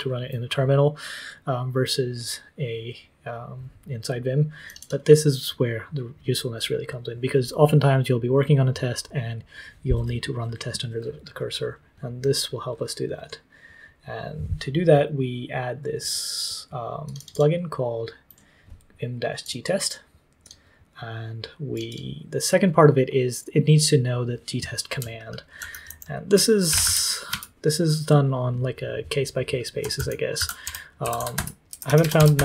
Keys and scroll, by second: 25.5 super+;, 25.8 super+l, 26.4-27.2 typing, 27.2 Return, 29.7-32.4 typing.